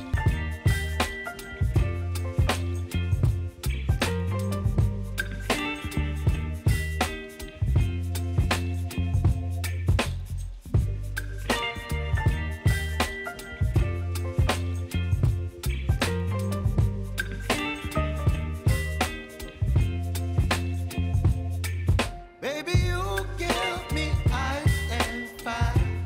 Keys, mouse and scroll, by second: 0.8 Return, 2.5-15.3 drag, 15.3-16.0 typing, 16.9-19.3 drag, 19.3 F9, 20.2 click, 21.3 F9, 21.7 space, 24.5 space, 25.8-26.0 drag.